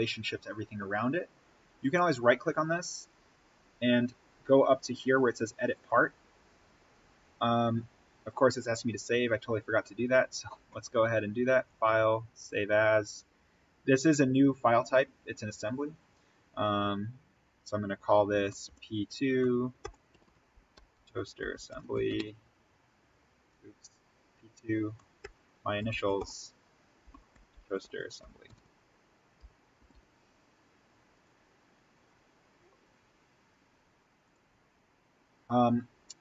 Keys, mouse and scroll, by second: 0.9 click, 1.7 right click, 5.6 click, 9.8 click, 18.4 click, 18.6 shift+p, 20.9-22.0 typing, 23.4 BackSpace, 25.7 n, 27.1-28.4 typing, 31.0 click, 34.1 click.